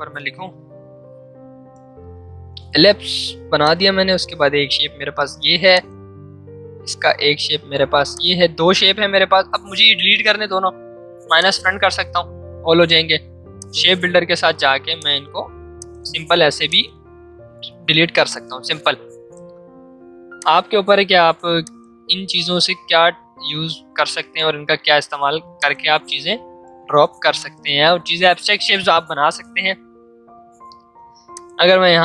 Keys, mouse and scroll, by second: 2.3 l, 3.6 click, 5.0 v, 5.7 alt+click, 8.1-10.9 drag, 11.3 click, 16.5 v, 25.0 ctrl+2.